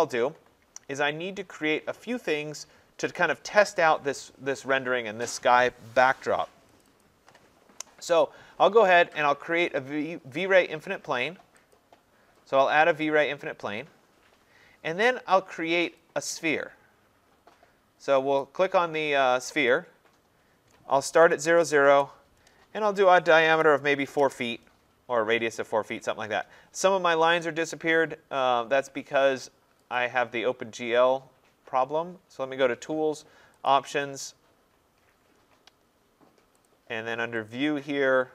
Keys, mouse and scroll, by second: 6.8 click, 7.0 click, 7.6-8.7 scroll, 11.7 click, 12.9-13.2 scroll, 14.1-14.6 scroll, 18.4 click, 19.7 click, 21.0-22.1 typing, 23.3-24.2 typing, 26.0 click, 27.3 click, 30.0 click, 33.7 click, 36.7 click, 37.5 click.